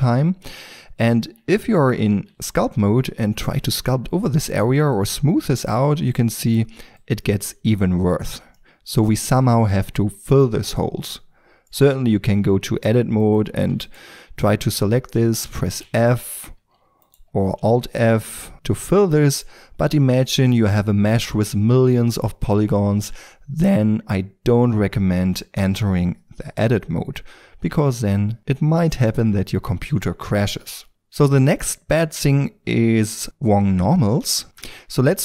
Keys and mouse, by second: 0.8 Tab, 2.0 ctrl+d, 2.3 f, 8.7-10.5 middle drag, 10.7-11.8 middle drag, 11.8 Tab, 15.8 f, 17.6 alt+f, 19.2-23.8 middle drag, 27.5 Tab, 29.0-30.3 middle drag, 30.9-33.2 right drag, 34.4 Tab, 34.4 n, 34.9 Tab.